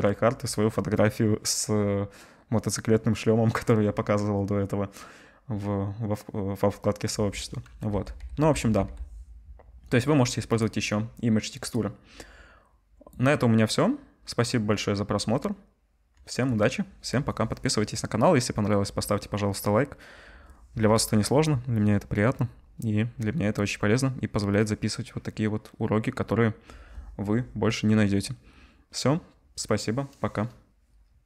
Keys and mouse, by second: 11.6 middle click, 11.7-31.2 drag.